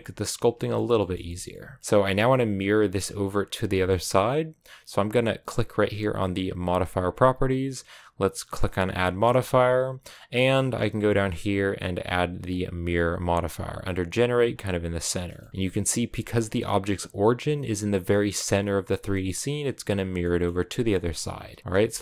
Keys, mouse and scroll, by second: 0.3 a, 0.4 middle click, 0.7 a, 0.8-1.8 shift+middle drag, 1.8-3.7 right drag, 3.7-14.4 shift+middle drag, 15.0 shift+middle click, 15.4-16.0 scroll up 2, 16.0 g, 17.7-18.8 middle drag, 18.8 scroll down 1, 18.9-21.1 middle drag, 21.1-21.6 scroll up 1, 21.6-22.0 shift+middle drag.